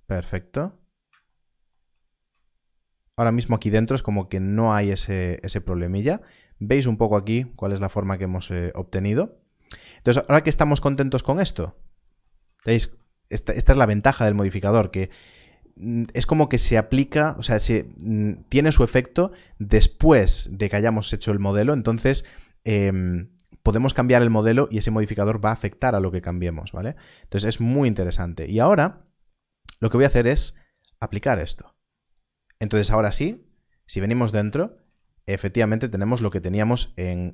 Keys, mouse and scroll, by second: 0.5-0.9 scroll up 1, 2.1 Tab, 4.5 scroll down 1, 7.7 Tab, 8.3 scroll up 1, 11.0-12.2 scroll up 1, 12.2 Tab, 33.0 Tab, 33.8-34.3 scroll up 1, 34.3 shift+scroll up 1, 35.6 scroll down 1.